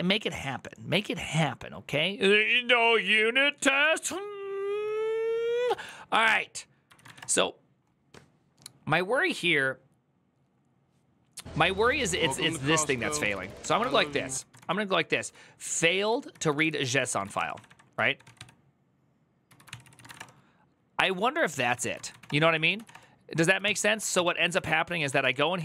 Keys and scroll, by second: 5.6 alt+{, 6.6-7.4 typing, 11.9-20.3 typing, 19.5 ctrl+c, 19.6 ctrl+c, 20.9 ctrl+a, 21.5 ctrl+c, 21.6-22.9 typing, 23.4 ctrl+t, 23.9 ctrl+n, 24.6-25.6 typing.